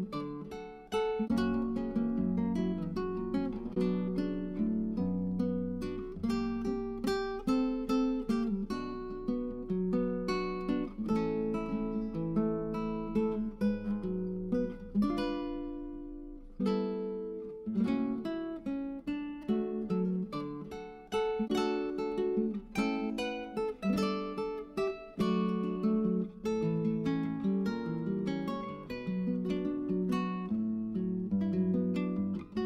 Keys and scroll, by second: 3.8-5.3 typing, 22.3 0, 27.2 0.